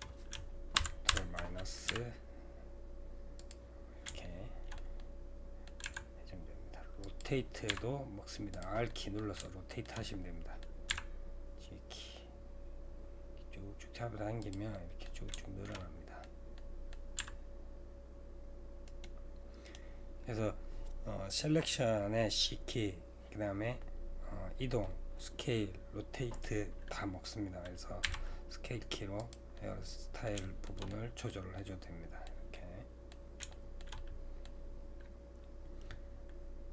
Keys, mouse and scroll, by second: 0.8 ctrl+KP_Subtract, 1.1 ctrl+KP_Subtract, 1.9 g, 3.8-4.2 scroll down 2, 4.2-5.8 shift+middle drag, 5.8 r, 8.9-10.9 middle drag, 10.9 g, 14.7-17.2 middle drag, 17.2 g, 19.7-29.6 right drag, 29.6-30.8 middle drag, 30.8-31.2 scroll up 2, 30.9 middle click, 31.2-35.4 middle drag, 35.4-36.7 scroll down 2.